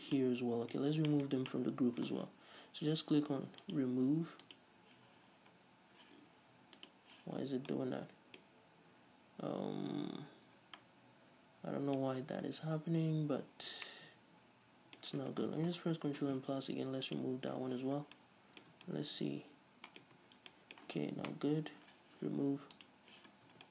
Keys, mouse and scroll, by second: 0.0-3.7 middle drag, 0.0 scroll down 2, 0.9-1.2 scroll up 2, 3.7-7.3 drag, 7.8-17.2 middle drag, 15.8 ctrl+KP_Add, 17.2 click, 17.7-22.9 middle drag, 18.1 scroll down 2, 18.9 Tab, 20.2 Tab, 20.2-20.6 scroll up 2, 21.4 ctrl+KP_Add, 22.9 click, 23.2-23.7 middle drag, 23.4 scroll down 2, 23.6 Tab.